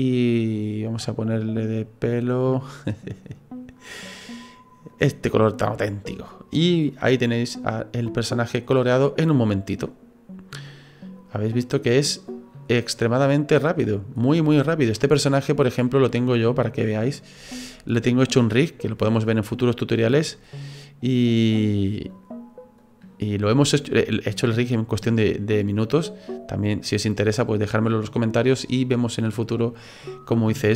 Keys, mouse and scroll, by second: 5.3 right click, 5.6 middle click, 6.6 scroll down 4, 6.9 middle click, 7.7 scroll down 2, 8.3 middle click, 8.7-9.4 scroll up 4, 9.1 middle click, 11.9 click, 12.7-13.1 scroll down 3, 13.0 middle click, 14.2-14.6 scroll up 4, 14.6 shift+middle click, 15.0 middle click, 20.0 click, 20.5-21.3 scroll up 2, 21.3 right click, 22.1 click, 23.5 shift+middle click, 24.0 right click, 24.9 middle click.